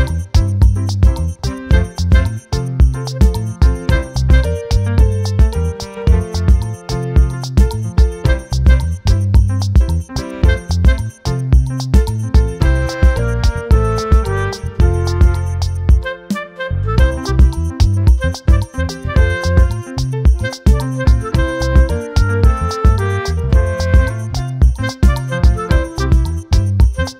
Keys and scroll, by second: 22.5 ctrl+t.